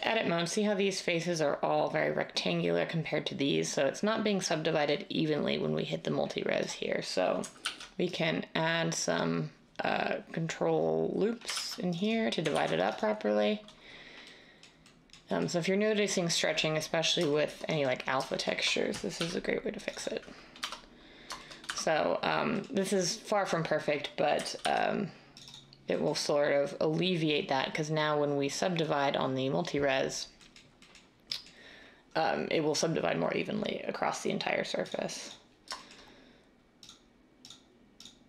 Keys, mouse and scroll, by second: 7.6 ctrl+r, 11.5 ctrl+r, 12.5 ctrl+r, 19.2 ctrl+r, 20.6 Tab, 21.6 Tab, 24.6 ctrl+r.